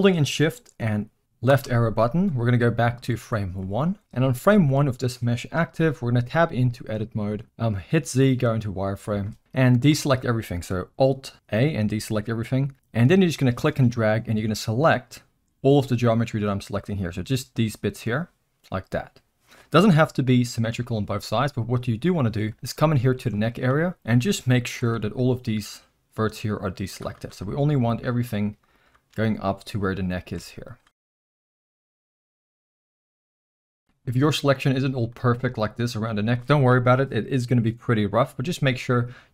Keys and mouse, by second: 1.5 shift+Left, 3.6-4.0 middle drag, 4.5 shift+middle drag, 5.5 KP_1, 6.2 Tab, 6.9 z, 9.9 alt+a, 13.5-18.0 drag, 22.1 middle click, 22.8 middle click, 23.4 shift+middle click, 23.7 middle drag, 27.4 middle click, 28.3 shift+click, 28.7 shift+click, 29.3 middle click, 30.6 shift+click, 31.0 middle click, 31.6 shift+click, 31.7 middle click, 32.0 shift+click, 32.7 shift+click, 33.2 middle click, 33.6 shift+click, 35.0 middle click, 38.9-39.3 middle drag.